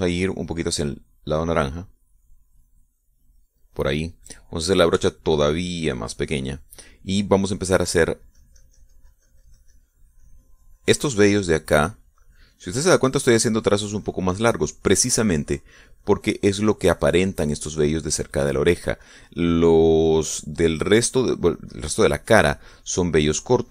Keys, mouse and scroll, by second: 1.7-4.9 drag, 6.3 f, 7.2 click, 9.5-23.7 drag.